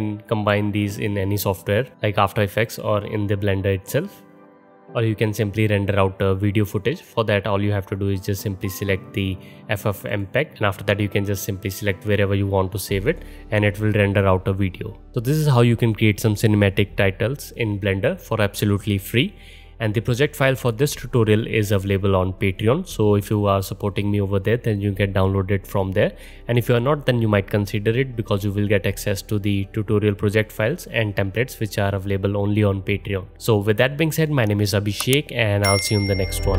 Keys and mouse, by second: 2.9-19.8 drag, 8.1-19.8 middle drag, 8.1-19.8 right drag, 19.9 click, 19.9 middle click, 19.9 right click, 20.1 click, 20.1 middle click, 20.1 right click, 33.3 click, 33.3 middle click, 33.3 right click, 34.2-36.5 drag, 34.2-36.5 middle drag, 34.2-36.5 right drag.